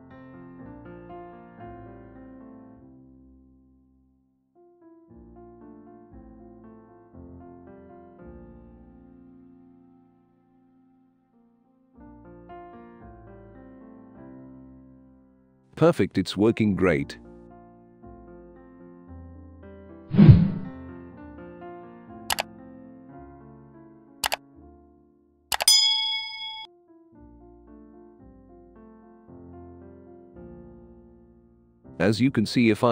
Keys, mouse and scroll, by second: 0.4-1.1 drag, 1.6 right click, 3.1 click, 5.7 click, 6.8 click, 8.2 click, 8.8 click, 12.1-12.9 drag, 13.1-15.5 right drag, 13.5 w, 16.0-17.2 drag, 17.5 click, 18.2 click, 19.5 click, 19.8 3, 20.1 click, 20.5 right click, 20.6 s, 21.2 click, 21.6 drag, 22.6 click, 23.0-23.7 drag, 23.9-24.9 alt+drag, 25.2 click, 25.3 right click, 25.6-26.4 drag, 26.8 right click, 27.4 click, 27.9 click, 28.6 click, 28.9 click, 29.6 click, 29.8 click, 30.4 click, 30.7 click, 31.5 click, 31.8 click, 32.6-32.9 right drag.